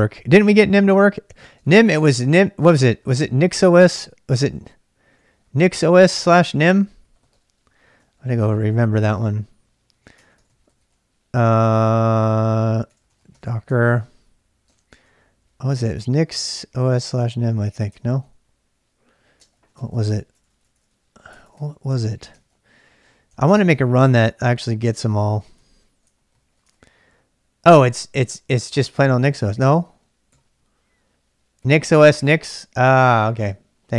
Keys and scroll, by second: 0.0-11.4 typing, 1.9 ctrl+[, 8.1 ctrl+a, 12.7-18.0 typing, 19.4-23.5 typing, 22.1 ctrl+c, 22.4 ctrl+[, 23.3 ctrl+[, 24.0 ctrl+c, 24.2 ctrl+c, 24.7-27.0 typing, 28.2 Return, 29.7 ctrl+[, 29.9 k, 30.3 k, 31.4-33.3 typing, 33.4 Return.